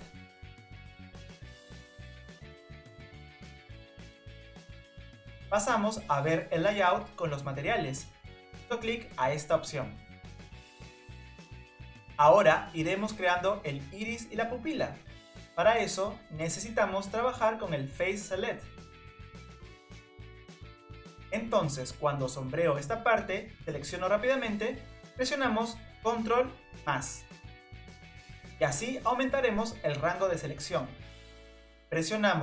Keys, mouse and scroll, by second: 9.8 click, 13.8 click, 17.8 click, 20.9 click, 22.2 click, 26.2 ctrl+KP_Add.